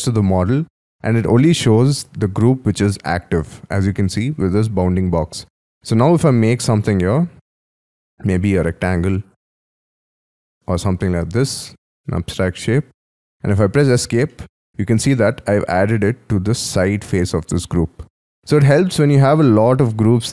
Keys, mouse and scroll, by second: 2.2-5.2 scroll up 3, 5.5-6.4 scroll up 14, 6.4-7.8 scroll, 7.8 space, 8.6 p, 11.0 double click, 11.5 double click, 11.7 middle click, 12.9-13.5 scroll down 2, 14.2 middle click, 14.9-16.2 scroll down 5, 16.2-18.0 scroll down 2, 18.0 scroll down 13, 18.4 scroll up 6, 18.8 scroll down 7.